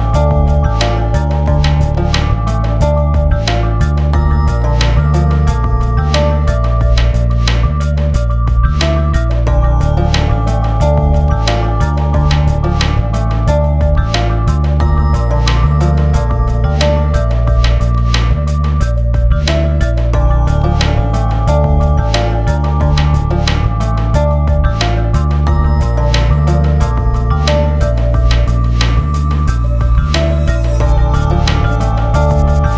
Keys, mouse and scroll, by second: 0.8-4.9 drag, 6.7 click, 10.5 ctrl+s, 10.6 click, 12.1 ctrl+s, 13.9-15.9 drag, 15.9-16.3 scroll down 1, 16.4 click, 17.7 F4, 18.4 click, 19.1 click, 20.1 Page_Down, 20.7 scroll down 1, 21.1 click, 21.6 right click, 22.2 Page_Up, 22.6 click, 23.5 a, 23.7 click, 24.6 scroll up 1, 26.7-29.5 drag, 29.5 alt+click, 31.1 scroll up 1.